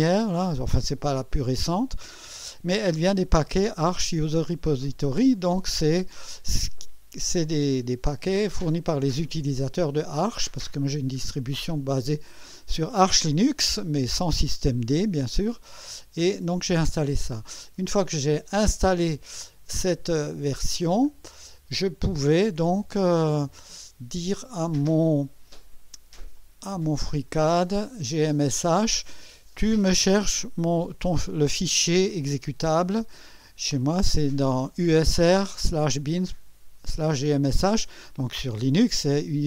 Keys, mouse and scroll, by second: 10.9-11.2 scroll up 1, 11.6 scroll up 1, 14.2-15.5 scroll down 3, 21.0 click, 23.3 click, 26.3 click, 28.0 click, 30.9 click.